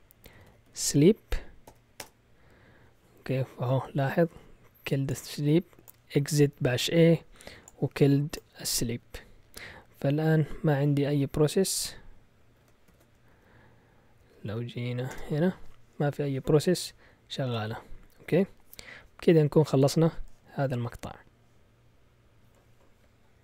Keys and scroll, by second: 0.0-1.7 typing, 2.0 Return, 11.8 Up, 12.4 Down, 12.9 ctrl+l, 13.3 Up, 14.2 Up, 14.4 Up, 15.1 typing.